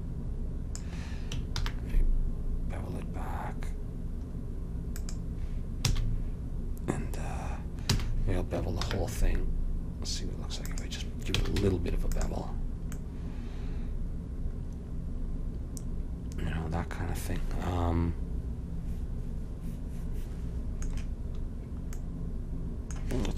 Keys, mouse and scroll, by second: 1.7 ctrl+b, 5.9 a, 8.0 a, 8.9 ctrl+b, 11.4 a, 11.6 Tab, 22.1-23.3 middle drag.